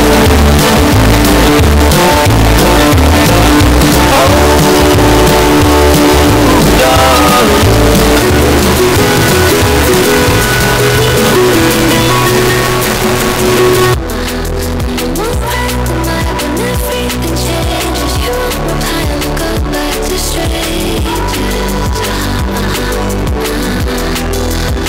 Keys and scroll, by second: 13.9 Page_Down.